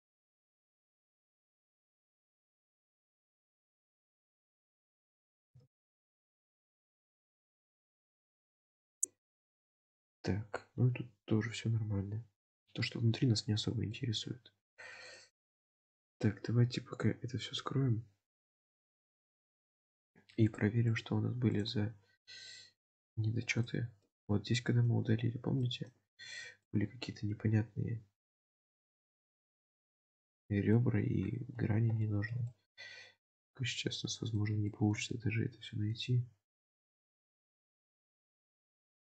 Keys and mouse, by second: 1.6 Tab, 2.1 alt+z, 4.9 alt+z, 5.5 g, 7.4 Tab, 9.0 click, 9.7-14.0 middle drag, 15.0 click, 15.4 click, 16.0 click, 18.9 click, 20.5 click, 21.0 click, 21.6 click, 22.8 click, 24.1-24.9 middle drag, 25.7 shift+middle click, 26.3 alt+z, 26.7-30.9 middle drag, 31.6 alt+z, 32.2 shift+middle click, 32.5-34.4 middle drag, 34.8 shift+middle click, 35.1 middle click, 36.6-39.0 middle drag, 38.2 alt+z.